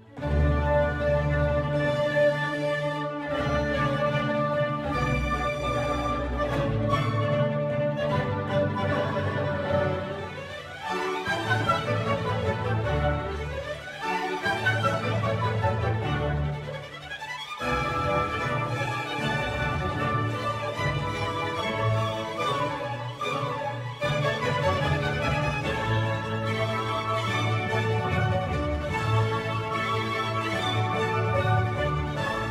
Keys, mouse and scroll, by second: 15.8-17.2 scroll down 2, 17.2-19.5 scroll down 1, 19.5-28.8 drag, 28.8-30.4 scroll up 2, 30.4-31.1 shift+middle drag, 31.1 scroll up 2, 31.3-32.5 scroll down 1.